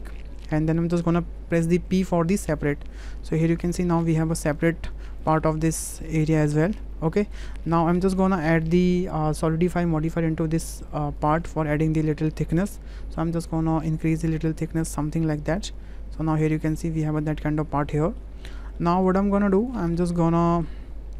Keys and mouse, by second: 1.9 p, 3.2 Tab, 3.6 drag, 4.5 click, 5.2-6.1 drag, 6.6 g, 7.6 click, 8.3 shift+click, 8.7 click, 9.6-11.3 drag, 11.9 click, 12.4 shift+click, 13.9-16.8 drag, 17.2-17.8 middle drag, 18.0 shift+middle drag, 18.8-19.1 drag, 19.6 click, 20.0-20.6 drag.